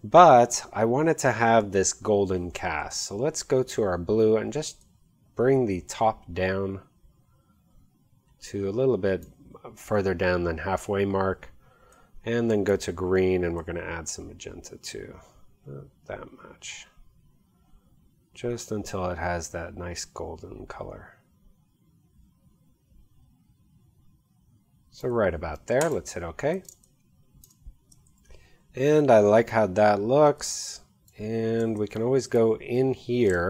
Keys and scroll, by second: 26.7 space, 28.1 v, 33.3 space.